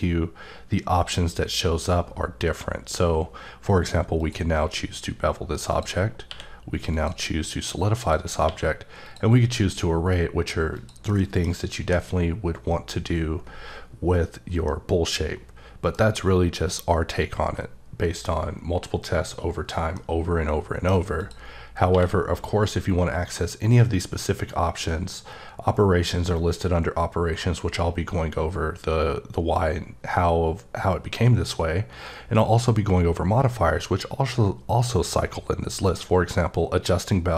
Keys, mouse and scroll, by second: 4.2 click, 4.9-5.7 scroll up 4, 5.7 click, 6.3 q, 6.9 click, 8.0 click, 8.4 q, 9.0 click, 10.7 click, 11.1 middle click, 11.8 h, 14.7 middle click, 16.1-16.5 scroll up 2, 19.9 middle click, 20.1-20.6 scroll down 2, 21.2 click, 21.9 q.